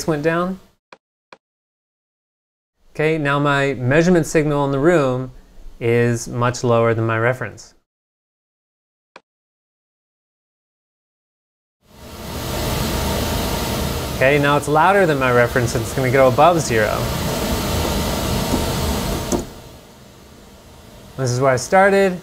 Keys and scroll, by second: 18.3-19.7 typing.